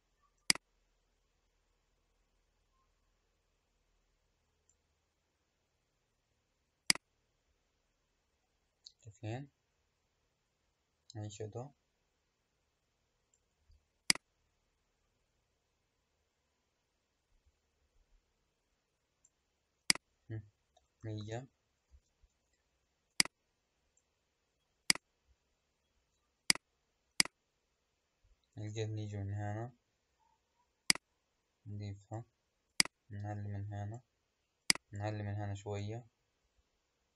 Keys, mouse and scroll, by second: 0.3-3.4 drag, 6.8-9.9 drag, 14.0-17.1 drag, 19.7-21.1 drag, 21.1 KP_0, 23.0-25.0 drag, 26.3 click, 27.0-28.1 drag, 28.1-30.8 scroll down 3, 30.8-37.1 drag.